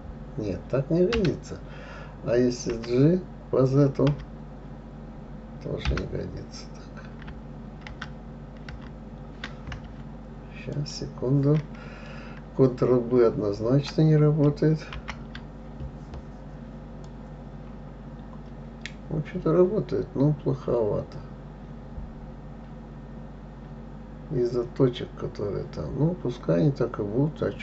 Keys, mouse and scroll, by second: 3.1 g, 8.3 ctrl+z, 9.1 ctrl+z, 11.1 shift+click, 17.4 click.